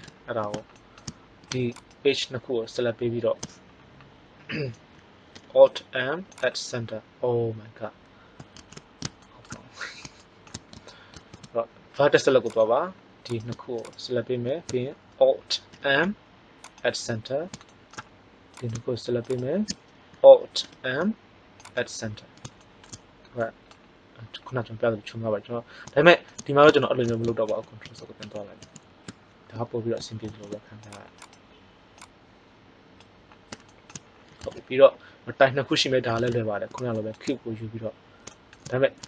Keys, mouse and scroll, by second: 0.3 middle click, 1.6-2.6 right drag, 5.3 alt+m, 8.6 ctrl+z, 9.1 middle click, 11.1 ctrl+Tab, 13.7-15.6 drag, 15.6 alt+m, 18.5-21.1 drag, 20.5 alt+m, 27.4 ctrl+z, 27.7 ctrl+z, 28.2 ctrl+z, 28.6 ctrl+z, 30.2 ctrl+Tab, 30.8 click, 31.2 right click, 31.9-32.9 drag.